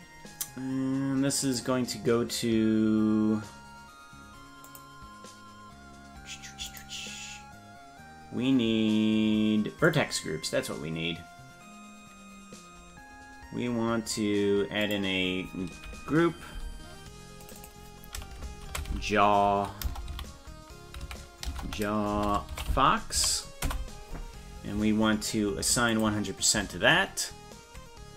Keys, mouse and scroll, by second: 1.5 click, 4.7 click, 6.7 click, 9.9 click, 14.9 click, 17.5 click, 17.6-24.5 drag, 26.0 click.